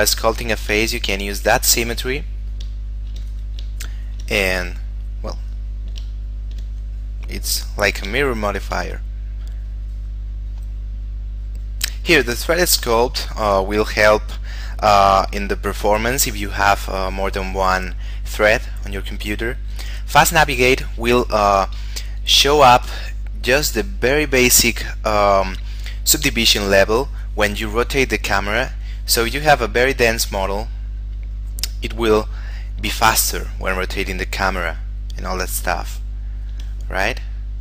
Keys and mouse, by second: 1.3 shift+middle click, 2.0 click, 3.1 shift+middle click, 3.5 click, 4.1 shift+middle click, 4.6 click, 6.4 shift+middle click, 7.0 click, 8.6 shift+middle click, 9.9 click, 28.8 click, 29.7 shift+middle click, 31.8 shift+middle click, 32.7 shift+middle click, 33.6 shift+middle click, 36.2 shift+middle click.